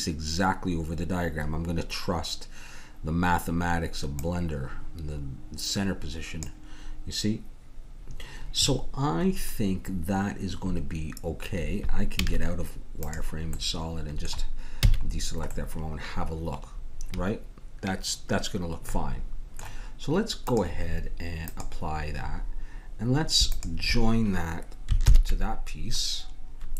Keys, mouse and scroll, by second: 4.2-5.8 drag, 12.2 z, 13.7-15.5 middle drag, 14.8 a, 20.5-23.3 drag, 23.5-25.3 drag, 25.0 ctrl+j.